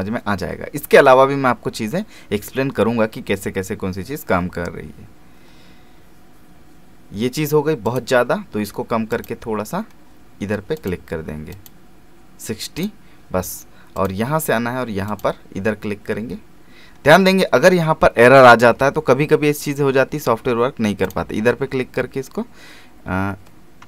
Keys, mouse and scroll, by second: 7.9 click, 10.8 click, 21.0 click.